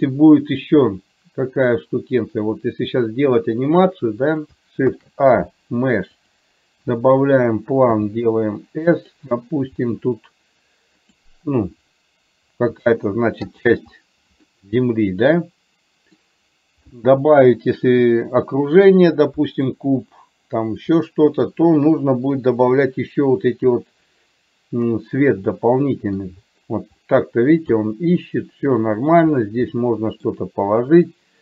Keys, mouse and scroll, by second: 0.0 click, 1.6 click, 4.9 shift+a, 8.0 s, 9.9 s, 12.9 s, 14.6-16.2 middle drag, 21.0 middle click, 25.6 middle click, 28.4-29.1 scroll up 1, 29.9 shift+middle click.